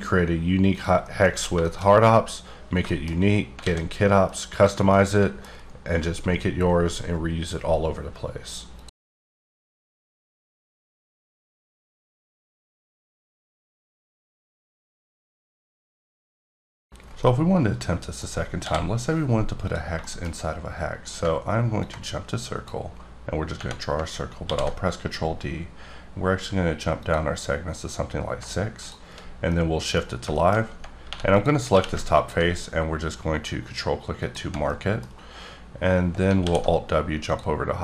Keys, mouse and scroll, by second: 0.7 click, 1.0-1.9 scroll up 4, 1.0 middle click, 1.7 shift+middle click, 2.5-2.9 scroll down 3, 2.9 middle click, 3.6 alt+a, 4.0-4.6 scroll down 3, 4.6 click, 4.9 middle click, 18.5 d, 19.6 click, 20.0 shift+middle click, 20.3-21.2 scroll up 1, 21.8 ctrl+click, 23.5 Tab, 24.4 ctrl+d, 27.0 click, 29.5 middle click, 30.0 scroll up 2, 30.3 shift+middle click, 31.1 3, 31.3 click, 31.7 q, 32.2 ctrl+click, 34.2 click, 34.7 middle click, 36.4 alt+w, 37.2 click.